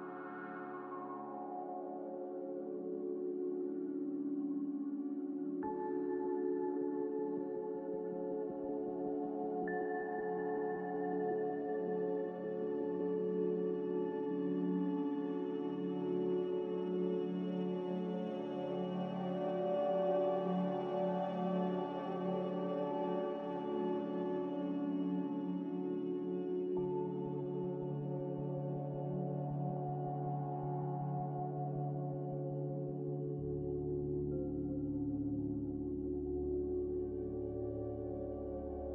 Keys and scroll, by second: 0.0 z, 18.6 z, 19.9-20.9 typing, 22.5 1, 27.3 a, 35.4 ctrl+z, 37.4-38.4 typing.